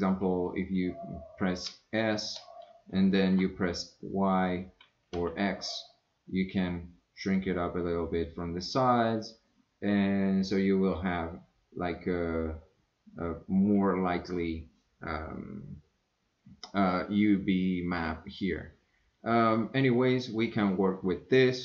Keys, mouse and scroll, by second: 1.7 s.